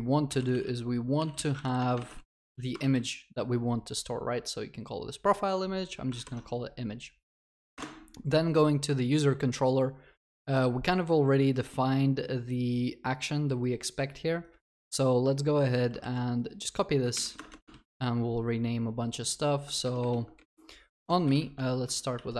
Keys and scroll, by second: 0.7 Tab, 2.9 ctrl+s, 6.1 ctrl+s, 6.2 ctrl+shift+n, 7.7 ctrl+shift+n, 16.0 ctrl+c, 17.7 ctrl+v, 19.8 ctrl+BackSpace, 22.1 ctrl+w.